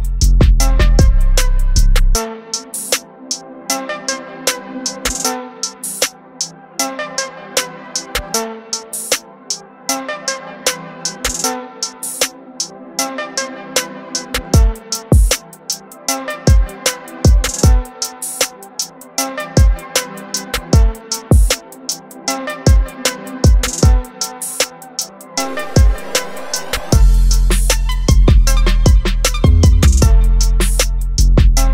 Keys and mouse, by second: 0.2 click, 2.1 click, 4.3 click, 11.5 click, 19.3 click, 22.3 click, 26.7 click, 28.5 click, 31.6 click.